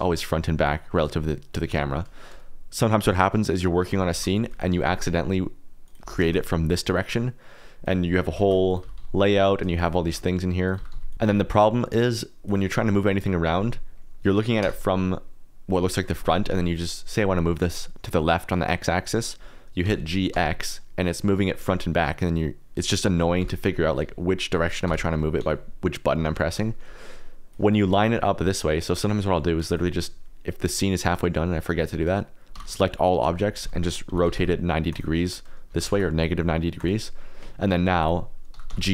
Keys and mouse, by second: 3.0 click, 3.2 middle click, 3.9 g, 4.1 shift+z, 4.4 click, 4.6 r, 4.8 z, 5.8 click, 6.0 g, 6.2 shift+z, 6.8 click, 7.8 click, 8.1 s, 8.4 shift+z, 8.7 click, 8.8 s, 8.9 z, 9.7 shift+click, 10.0 shift+a, 10.7 g, 10.9 z, 11.1 click, 11.1 shift+d, 11.7 click, 12.4 click, 13.9 click, 14.6 KP_0, 16.3 click, 19.8 g, 20.3 x, 23.4 y, 24.0 z, 24.8 y, 25.4 x, 26.2 Escape, 27.5 click, 28.1 middle click, 29.6 click, 32.5-34.4 typing, 35.2 click, 35.7 g, 35.9 shift+z, 36.7 click, 37.6 click, 38.5 g, 38.7 x.